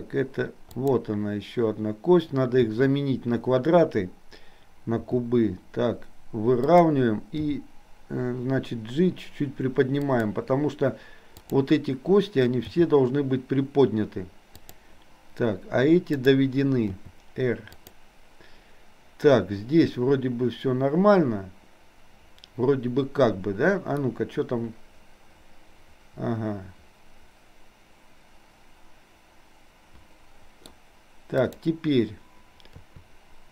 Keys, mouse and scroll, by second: 0.8 click, 2.6 KP_3, 5.0 r, 7.4 g, 11.4 click, 12.6 g, 16.1 click, 16.9 r, 24.1-30.8 middle drag, 31.5 click, 32.9 KP_3.